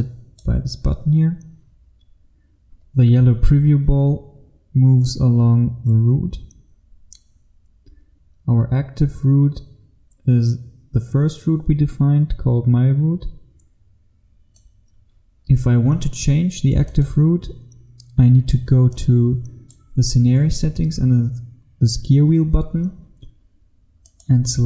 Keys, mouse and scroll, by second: 0.0 click.